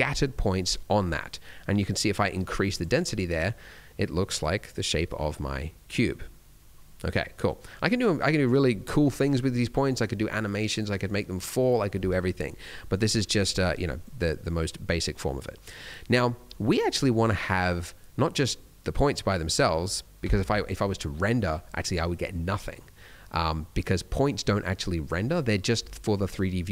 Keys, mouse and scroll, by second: 0.5 middle click, 1.7 click, 3.1 middle click, 4.4 click, 5.1 middle click, 7.4 middle click, 14.0 click, 16.2 middle click, 17.3 middle click, 20.6 F12, 21.9-22.9 scroll down 1, 22.9 middle click, 23.8 middle click, 25.7 Escape.